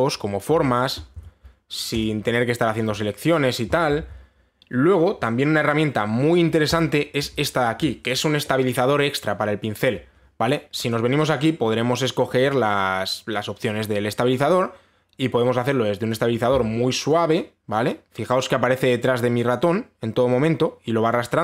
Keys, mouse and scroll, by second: 0.7 click, 1.8 ctrl+z, 2.6 click, 3.9 click, 4.6 ctrl+z, 7.4 click, 11.5 click, 16.7 click.